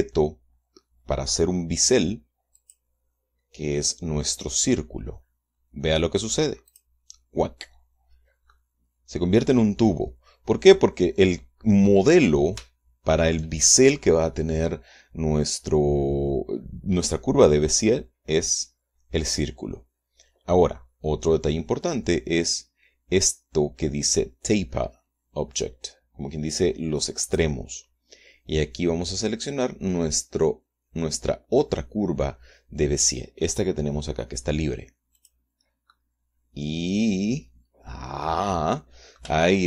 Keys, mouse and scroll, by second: 3.1 click, 7.2 click, 9.0-11.4 drag, 13.1 shift+click, 27.8 click, 35.7 click, 36.4-38.6 drag, 38.6-39.6 middle drag.